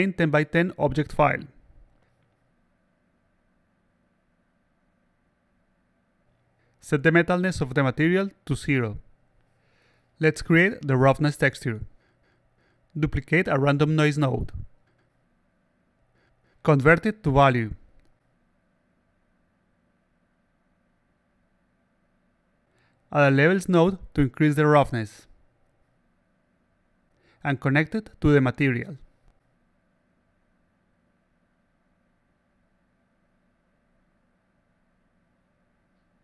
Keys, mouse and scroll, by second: 0.9 click, 2.7 click, 4.0-4.6 alt+drag, 4.7-5.4 alt+drag, 6.3 click, 6.4 click, 7.9 click, 12.7-13.9 shift+drag, 15.1 click, 16.7 click, 18.4 click, 19.0 click, 19.5 click, 21.6 click, 22.4 click, 24.4-27.0 drag, 28.0 click, 29.5 click, 30.5 click, 31.4-32.4 drag, 33.1-33.8 alt+drag, 34.0-34.7 alt+drag, 36.1-36.2 alt+drag.